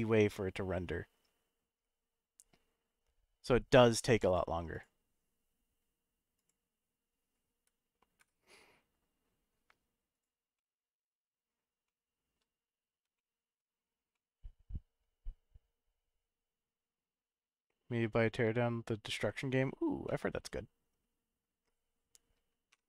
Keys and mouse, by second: 4.4 click, 6.4 click, 8.2 KP_0, 10.1 click, 10.5-11.4 middle drag, 11.8-12.3 shift+middle drag, 13.1-13.5 shift+middle drag, 14.1-15.0 middle drag, 20.0 middle click, 22.8 F12.